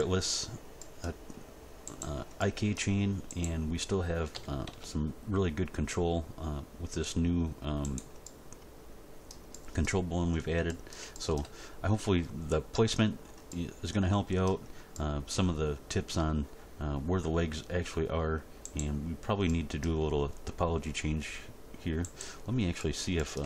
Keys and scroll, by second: 4.3 r, 4.7 x.